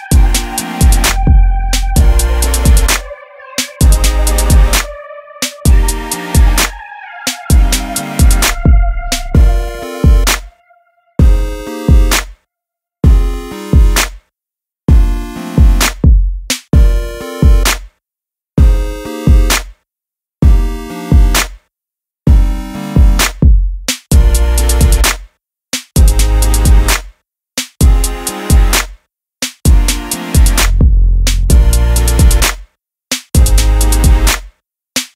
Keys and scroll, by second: 7.4 Return, 15.9 super+g, 17.2 super+j, 20.1 super+a, 21.1 super+j.